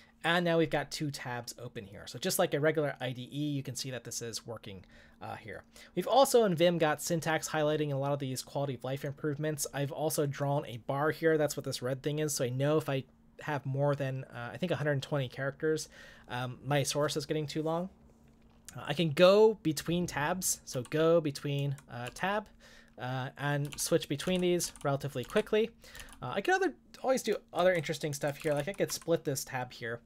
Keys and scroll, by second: 20.8-26.5 typing, 27.6-29.1 typing.